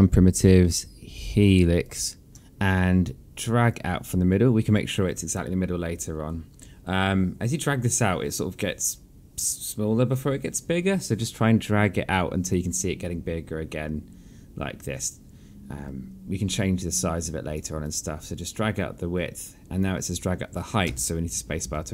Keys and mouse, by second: 4.4 click, 21.6 space.